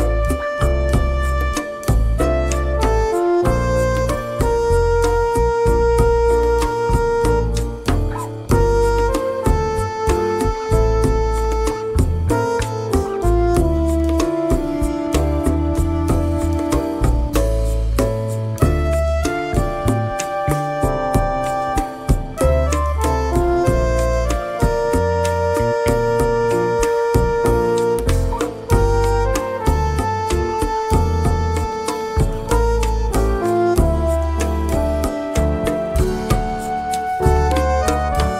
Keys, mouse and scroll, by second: 3.3 click, 4.5 ctrl+d, 6.8 click, 8.2-9.2 drag, 9.5 click, 11.4 click, 16.0 click, 17.8-19.1 drag, 20.5 Down, 21.0 Right, 23.3-25.1 drag, 25.9 click, 33.8 shift+F6, 36.3 click, 37.2 click, 38.0 click.